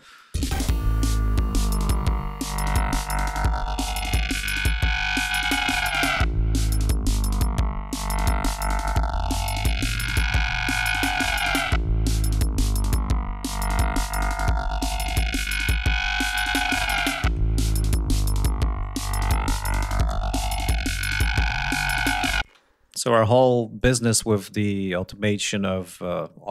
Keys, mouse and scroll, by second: 0.1 click, 0.3 space, 0.8-3.2 scroll down 8, 3.4 scroll up 2, 5.9 click, 7.0-7.4 scroll up 2, 7.5 scroll down 2, 8.2 click, 12.4-13.2 ctrl+scroll down 4, 13.6-14.0 scroll up 2, 15.6-16.0 scroll up 2, 18.4 scroll up 2, 18.8 scroll down 2, 21.2 scroll up 2, 21.8 scroll down 2, 22.5 space, 23.8 click.